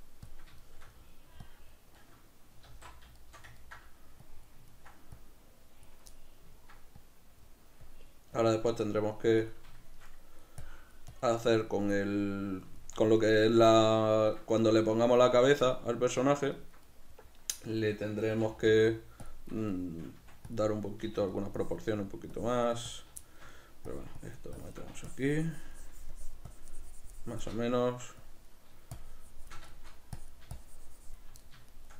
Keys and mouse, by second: 0.3-1.5 middle drag, 1.5 click, 2.1-4.3 middle drag, 2.7 alt+q, 4.3 click, 4.8 ctrl+middle click, 5.3 click, 6.2 middle click, 7.1-8.8 drag, 8.8 middle click, 9.5 click, 9.9 shift+middle click, 10.7-12.0 drag, 12.0-19.4 middle drag, 18.4 shift+c, 18.6 f, 19.4 click, 19.8 shift+middle click, 20.3 f, 20.7 click, 21.1 f, 21.7-23.2 drag, 23.2 shift+middle click, 23.9-29.7 drag, 29.7 shift+middle click, 30.2-31.4 drag, 31.4 middle click.